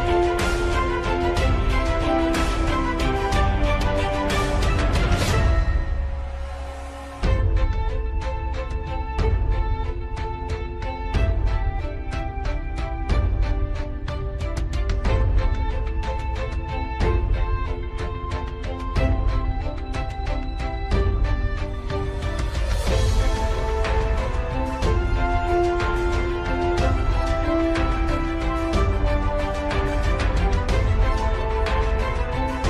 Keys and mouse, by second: 1.2 shift+d, 2.9 g, 8.1 r, 12.7 shift+middle click, 15.3 g, 18.9 KP_3, 20.5 g, 24.7 g, 27.8-29.6 middle drag, 30.3 middle click, 31.2 middle click.